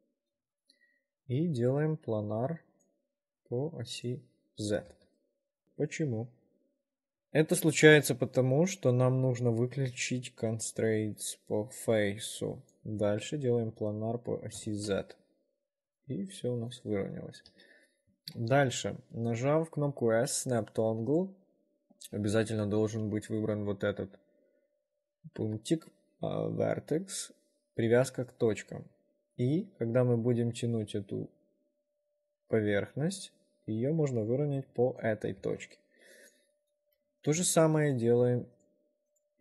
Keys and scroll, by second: 14.9 ctrl+r, 17.7 w, 18.5 s, 37.2 w.